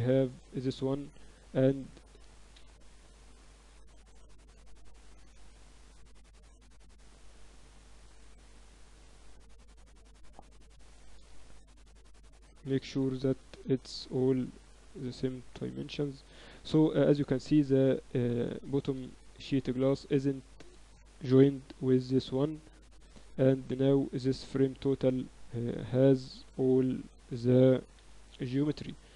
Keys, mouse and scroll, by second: 1.0-3.6 right drag, 5.9 z, 6.4 z, 10.6 ctrl+KP_1, 10.9 z, 11.5 KP_8, 11.7 KP_8, 13.4 KP_Divide, 15.1 Tab, 15.5 Tab, 15.7 Tab, 16.3 Tab, 16.5 KP_Divide, 17.7-19.3 right drag, 18.3 z, 18.8 z, 19.3 z, 20.2-21.3 right drag, 21.3 ctrl+j, 23.0 right click, 23.5 middle click, 24.3 ctrl+z, 25.6 KP_Divide, 26.3 Tab, 26.6 a, 26.8 a, 27.0 a, 27.3 Tab, 27.8 KP_Divide.